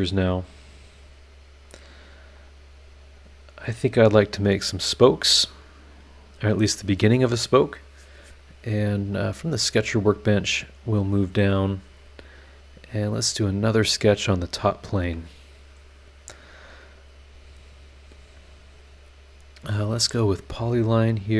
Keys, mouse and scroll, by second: 0.8 click, 2.4 click, 4.7 click, 9.7 click, 10.8 click, 13.0 click, 14.7 click, 20.2 click, 21.0 click.